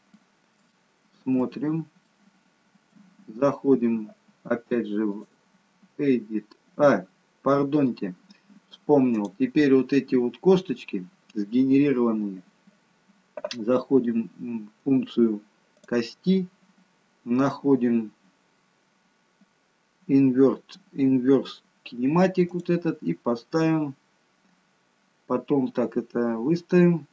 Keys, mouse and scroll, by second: 0.6 shift+middle click, 1.6 scroll up 2, 2.0 middle click, 5.1 click, 7.3-8.1 scroll down 2, 9.0 click, 15.7 click, 17.3-18.7 scroll down 4, 22.5 click, 24.3-25.5 scroll down 2.